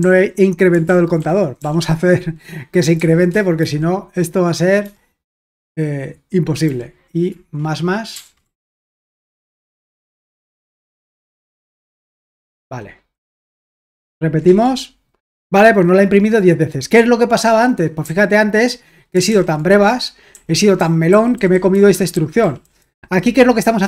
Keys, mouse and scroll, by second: 0.0 k, 0.8 super+l, 1.6 typing, 3.0-4.8 typing, 6.6 typing, 8.1-9.7 typing, 10.0 Escape, 10.7-12.4 typing, 13.2 super+h, 13.9-14.9 typing, 18.0 k, 19.3 super+l, 20.3-22.9 typing.